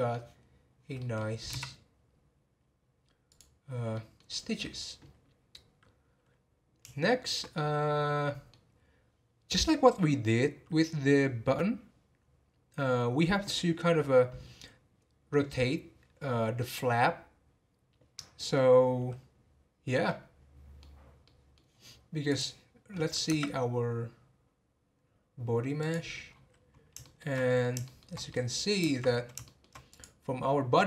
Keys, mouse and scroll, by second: 1.5 x, 3.9-6.9 middle drag, 7.0-10.6 shift+middle drag, 16.6-19.7 middle drag, 20.0-22.3 middle drag, 22.3-23.3 drag, 23.3 Tab, 24.3-25.8 scroll up 2, 25.8 click, 26.3-27.0 scroll down 7, 27.0-29.1 shift+middle drag, 29.1-29.4 scroll up 3, 29.4-29.9 shift+middle drag, 29.9 click, 30.5 scroll up 2.